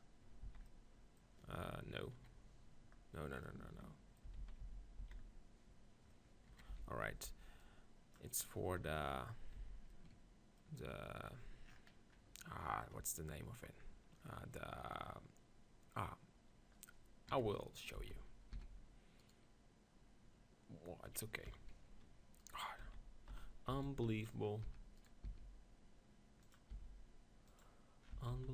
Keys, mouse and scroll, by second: 0.5 z, 0.7 click, 2.2 KP_3, 4.4 ctrl+z, 4.6 ctrl+z, 5.0 ctrl+z, 6.5 KP_3, 6.7 z, 7.1 b, 8.8 KP_7, 10.0 middle click, 14.6 middle click, 16.5 middle click, 17.3 KP_3, 18.0 z, 18.5 s, 19.3-21.2 right drag, 21.5 KP_7, 22.4-24.4 right drag, 22.8-25.3 typing, 24.5 middle click, 26.3 click, 26.5 click, 26.8 e, 28.2 Tab, 28.3 z.